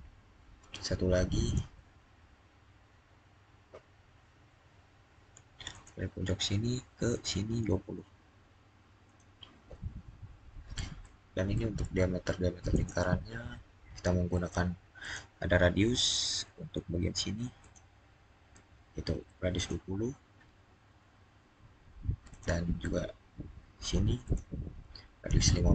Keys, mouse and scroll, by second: 1.2 click, 4.4 click, 5.5 click, 10.1 click, 10.2-10.8 scroll down 1, 10.8-12.5 middle drag, 12.5 click, 14.8 click, 17.4 click, 19.4 click, 22.1 click, 24.1 click.